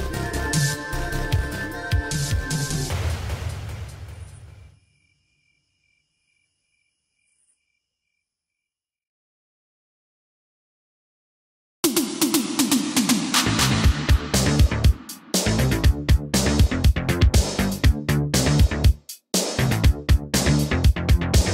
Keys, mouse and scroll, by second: 0.9 scroll up 1, 3.3 click, 12.3 space, 16.2 space, 19.0 space, 20.7 Return.